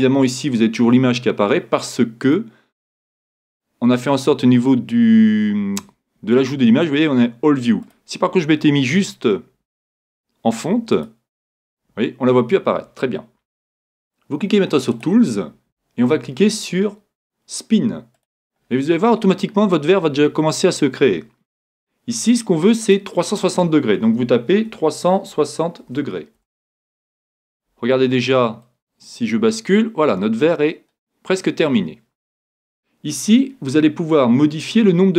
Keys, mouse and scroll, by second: 7.8-9.7 drag, 14.9-16.8 drag, 18.2-20.1 drag, 22.3-24.7 drag, 28.6-30.5 middle drag.